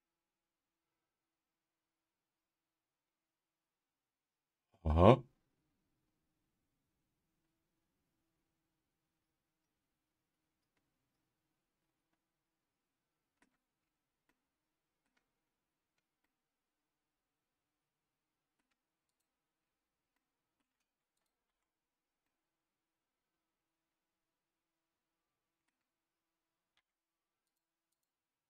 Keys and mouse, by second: 14.3 middle click, 16.2-18.6 middle drag, 19.1 click, 20.1 middle click, 21.1 click, 21.4 Tab, 22.2-25.6 middle drag, 26.7 Tab, 27.4 click, 27.9 click.